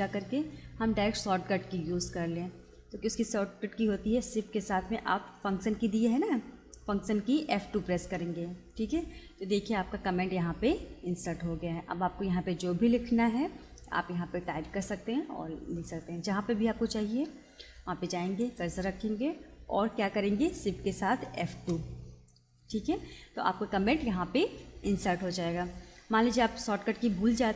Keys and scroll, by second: 7.7 shift+F2, 16.9 Escape, 21.4 shift+F2.